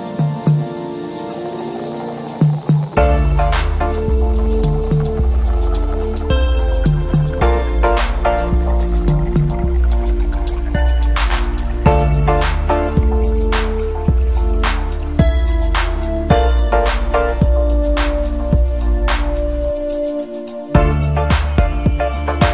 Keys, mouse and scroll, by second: 0.3-2.2 middle drag, 2.2 r, 6.3-6.9 scroll down 1, 6.9-7.5 scroll up 1, 7.5-8.9 middle drag, 8.9 click, 10.7-11.9 drag, 12.3 click, 17.3 click, 18.0-19.0 scroll down 1, 19.2 click, 19.8-22.0 scroll up 2, 22.0 drag.